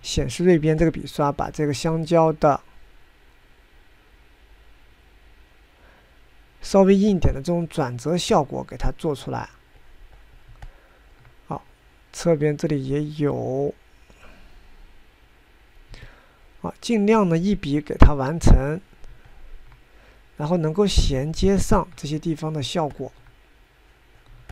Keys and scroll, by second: 3.5 Escape.